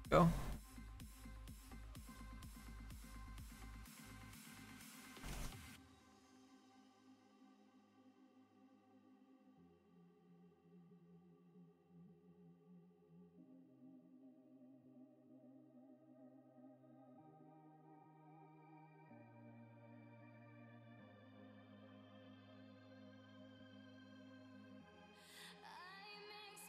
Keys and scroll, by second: 17.3 ctrl+z.